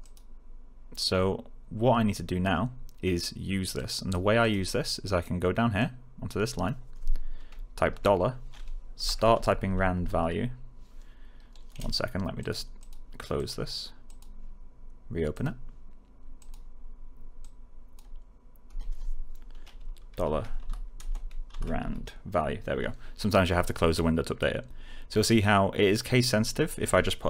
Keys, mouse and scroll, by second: 3.7-4.3 click, 7.8-10.4 typing, 11.8-12.6 typing, 12.3 click, 20.0 shift+4, 20.5 r, 21.7 a.